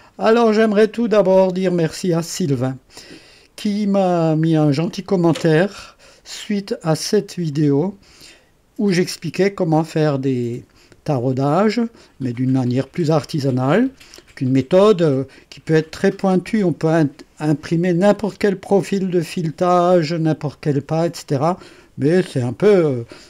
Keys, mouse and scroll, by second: 7.5 click.